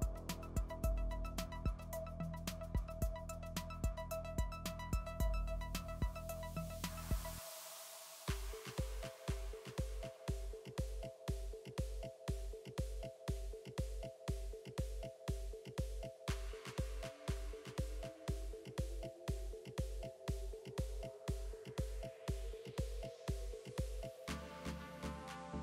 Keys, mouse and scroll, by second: 0.1 middle click, 0.1 KP_3, 1.4 Tab, 1.8 click, 6.2 a, 6.6 s, 8.4 click, 9.1 g, 10.5 Tab, 10.7 click, 11.7 middle click, 11.8-15.1 drag, 14.5 ctrl+r, 14.9 Tab, 15.4 ctrl+r, 17.0 ctrl+r, 17.7 Tab, 17.8 click, 18.0-19.5 middle drag, 21.8-23.7 middle drag, 23.9 shift+a.